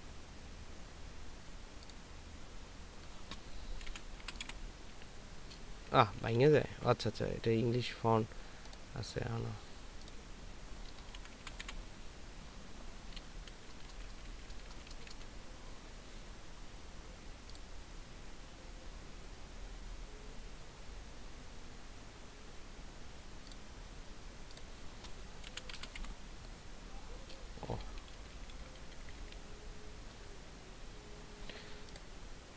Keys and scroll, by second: 4.4 a, 4.4 m, 4.4 i, 6.0 BackSpace, 6.2 BackSpace, 6.4 BackSpace, 6.6 BackSpace, 13.5 BackSpace, 13.7 BackSpace, 13.9 BackSpace, 27.8 BackSpace, 28.0 BackSpace, 28.2 BackSpace, 30.1 BackSpace.